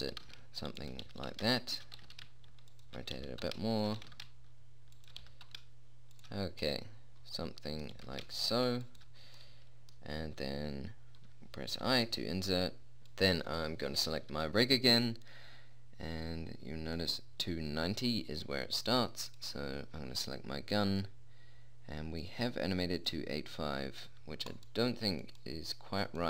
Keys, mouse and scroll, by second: 0.5 g, 1.4 g, 2.4 r, 3.6 g, 4.4 r, 5.6 g, 8.3 g, 13.3-17.2 drag, 17.2-18.4 middle drag, 19.6-21.4 right drag, 21.4-23.2 drag, 23.2 middle click, 23.4 click, 24.8-26.2 drag, 24.8 right click.